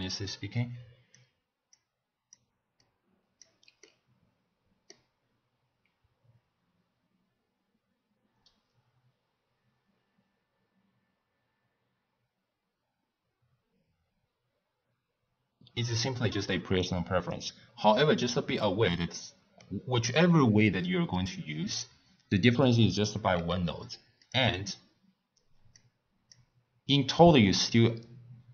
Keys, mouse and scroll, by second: 1.7 click, 2.8 click, 3.9 scroll down 1, 3.9-7.1 middle drag, 16.0-16.8 scroll up 1, 16.8-18.5 middle drag, 18.5-19.1 scroll down 1, 19.1-20.2 middle drag, 20.2 click, 21.8 click, 23.3 g, 24.5 click, 25.7 click, 27.1 click.